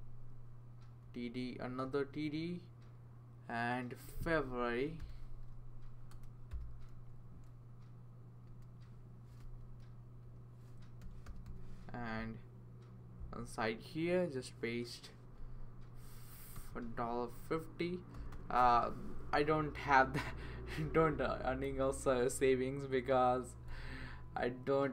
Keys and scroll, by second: 1.0 Right, 1.7 Down, 4.7-7.0 typing, 8.5-12.0 typing, 16.5 shift+4, 17.9-18.8 typing, 23.7 BackSpace.